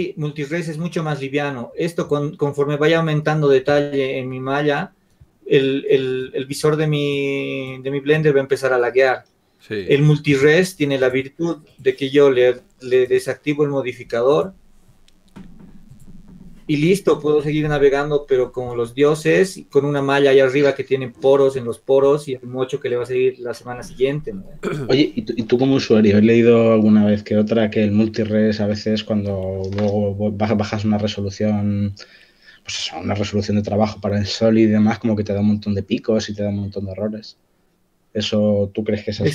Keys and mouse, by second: 10.4 Tab, 14.1-18.0 drag, 30.5-35.0 drag.